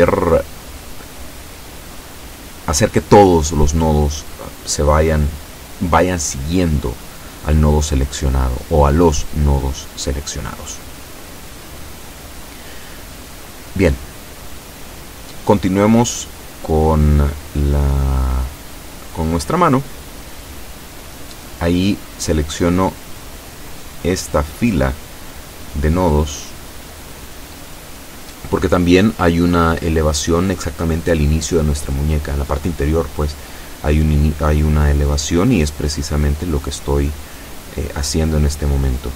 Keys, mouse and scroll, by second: 5.9 o, 7.7-8.9 shift+middle drag, 8.9-9.4 shift+scroll up 2, 10.9 Tab, 11.5-13.2 middle drag, 13.1 Tab, 15.6-17.5 drag, 17.8 KP_7, 19.6 right click, 20.2 click, 21.3-21.7 scroll up 1, 22.3 shift+right click, 23.4 shift+right click, 24.2 shift+right click, 24.9-25.9 shift+middle drag, 26.5 shift+right click, 27.1 shift+right click, 28.0 shift+right click, 28.6 shift+right click, 29.6 shift+scroll down 3, 30.9-32.3 middle drag, 32.6-37.2 drag, 37.8 KP_7.